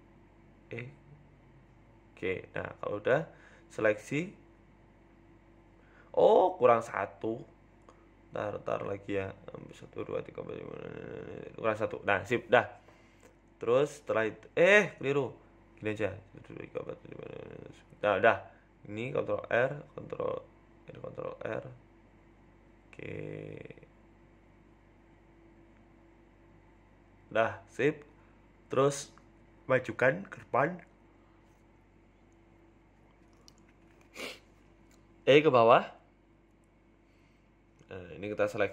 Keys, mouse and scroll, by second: 0.4 a, 0.6 KP_1, 1.4 e, 3.8 click, 4.5 shift+click, 7.3 ctrl+z, 7.4-7.8 ctrl+z, 8.8 ctrl+z, 9.1 ctrl+z, 9.4 ctrl+z, 10.0 ctrl+r, 15.5 ctrl+z, 16.0 ctrl+r, 20.0 ctrl+r, 20.7 ctrl+t, 20.9 ctrl+click, 20.9 ctrl+right click, 21.4 ctrl+t, 22.3 ctrl+r, 23.0 ctrl+r, 24.0 ctrl+r, 24.5 ctrl+r, 25.4 click, 26.2 click, 26.8 shift+click, 29.7 KP_3, 30.7 g, 33.7 a, 34.0 e, 37.1 KP_1, 38.1 click, 38.6 shift+click.